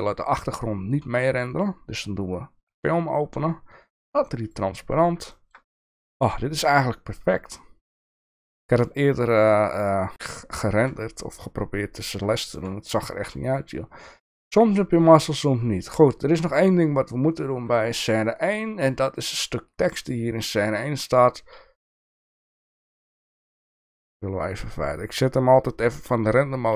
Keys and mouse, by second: 1.6 click, 3.8 click, 4.5 click, 5.5 shift+middle click, 7.1 shift+middle click, 12.5 shift+middle click, 13.4 click, 17.3 click, 20.0-20.6 drag.